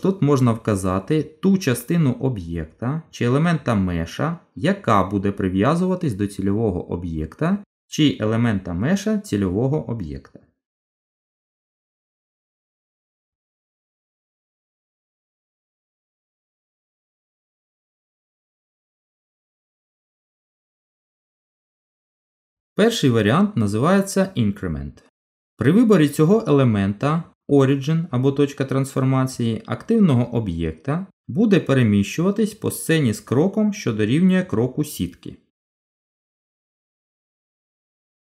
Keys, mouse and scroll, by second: 11.7 shift+click, 12.1 shift+click, 12.8 Delete, 13.7 shift+a, 15.2 middle click, 16.1-17.3 scroll up 2, 17.4 shift+middle click, 18.2 middle click, 23.3 click, 31.2 g, 36.9 z.